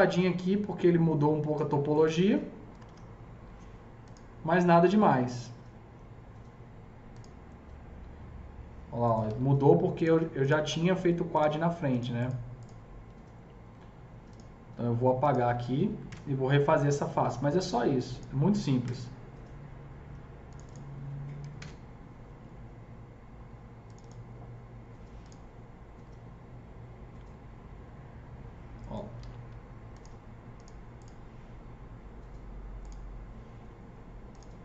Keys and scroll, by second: 2.3 F3, 2.7 F3, 2.8 F4, 9.2 alt+c, 16.1 ctrl+BackSpace, 18.9 ctrl+BackSpace, 21.5 ctrl+BackSpace, 29.2 alt+c.